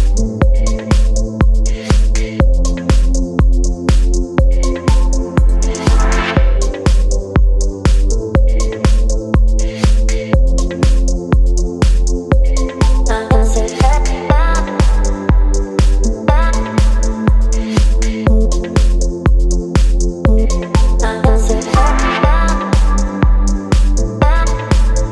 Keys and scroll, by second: 15.4 ctrl+t, 18.3 Return, 20.6 ctrl+t, 20.9 space, 24.1 Return, 24.6 space.